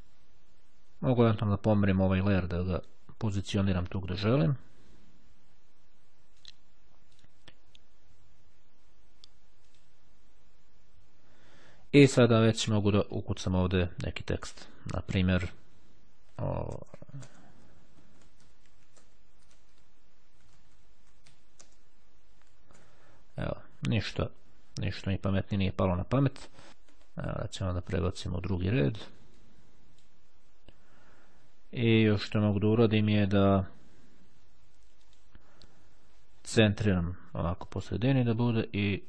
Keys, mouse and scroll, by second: 0.9-4.9 drag, 6.5 click, 7.3 right click, 9.7 click, 12.7 click, 14.5 click, 15.8-22.2 typing, 25.7 click, 26.7 Delete, 26.9 Return, 29.5-30.6 drag, 32.5 click, 35.2 click, 38.6-39.0 drag.